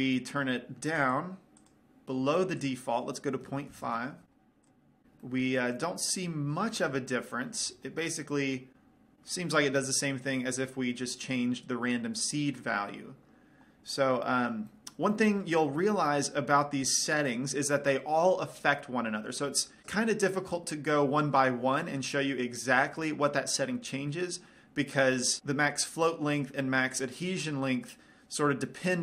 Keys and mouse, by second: 1.4 middle click, 2.2-3.3 right drag, 2.9-4.4 drag, 4.4-5.6 middle drag, 5.0 click, 7.5 middle click, 8.5-9.9 middle drag, 10.1-11.6 middle drag, 11.6-14.6 drag, 14.6-18.3 middle drag.